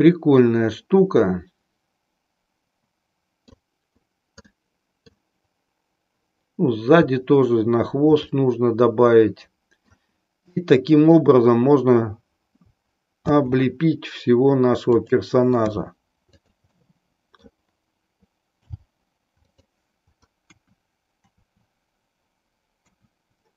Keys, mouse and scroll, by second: 4.4-5.3 middle drag, 8.2-10.0 middle drag, 10.7-11.3 middle drag, 13.3 shift+d, 14.9 click, 15.7 r, 16.8-17.6 middle drag, 18.6 g, 20.4 KP_1.